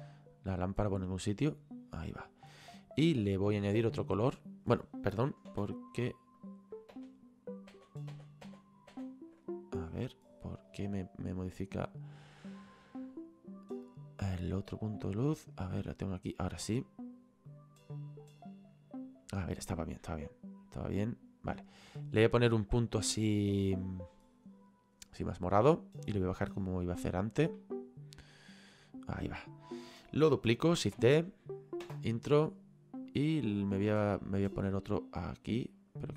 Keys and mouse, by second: 0.8 click, 2.9 click, 6.5 click, 14.9 click, 16.8 click, 26.5 click, 28.4 click, 33.1 click.